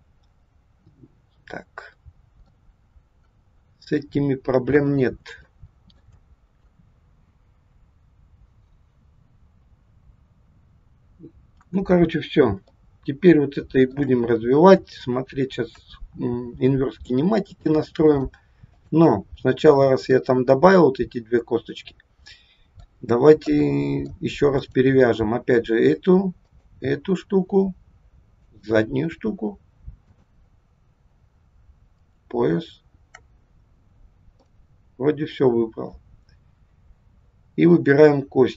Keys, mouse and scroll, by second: 2.9 scroll down 1, 3.5 scroll down 1, 5.5 shift+middle click, 11.5 KP_1, 12.3 scroll down 1, 12.8 shift+middle click, 18.0 click, 19.6 scroll up 2, 20.1 middle click, 23.5 middle click, 23.5-24.6 scroll up 1, 24.6 click, 26.4 shift+click, 28.4 shift+click, 30.1 shift+click, 31.9 shift+click, 33.6-34.5 scroll down 2, 34.5 middle click.